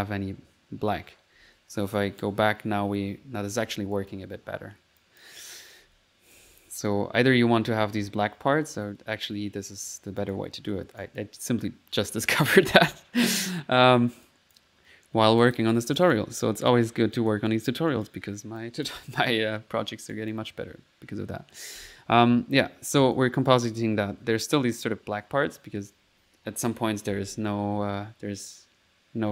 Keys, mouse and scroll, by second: 1.5 1, 2.0 click, 4.0 click, 5.0 click, 5.9-8.7 typing, 10.3 click, 10.7 middle click, 11.1 click, 11.7 middle click, 12.5 click, 14.3 click, 15.5 click, 16.0 click, 16.6 click, 17.2 click, 17.6 click, 17.8 click, 18.6 click, 19.4 click, 20.2 click, 21.3 middle click, 21.6-22.3 typing, 23.1 click, 23.5 click, 23.5 typing, 28.3 middle click.